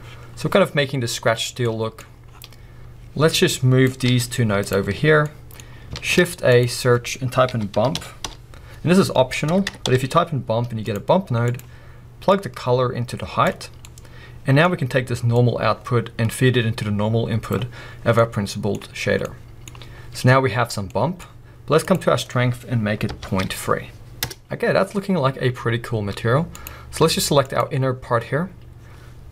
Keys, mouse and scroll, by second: 0.1 click, 5.2 middle click, 10.5-12.3 middle drag, 11.0 BackSpace, 12.3-13.4 drag, 14.2-17.5 middle drag, 17.5-18.5 drag, 18.5-24.2 middle drag, 24.2-27.6 drag, 24.4 scroll up 2, 26.7 z.